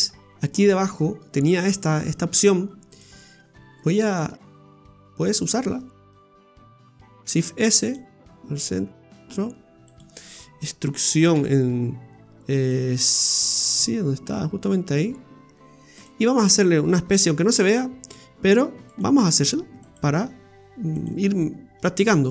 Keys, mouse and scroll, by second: 0.0 Tab, 0.5-1.0 scroll up 3, 1.2 middle click, 2.9 click, 3.8 right click, 4.6 shift+right click, 4.9 right click, 5.3 shift+right click, 5.8 shift+right click, 6.2 shift+right click, 7.1 shift+s, 8.8 s, 10.2 middle click, 11.3 e, 17.2 ctrl+r, 19.6 ctrl+r, 21.2 middle click, 21.9-22.3 scroll up 3.